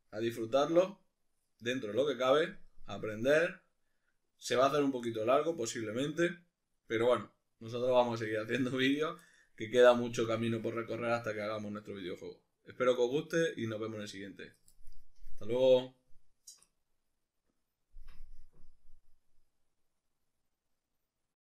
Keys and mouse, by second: 19.5-21.4 middle drag.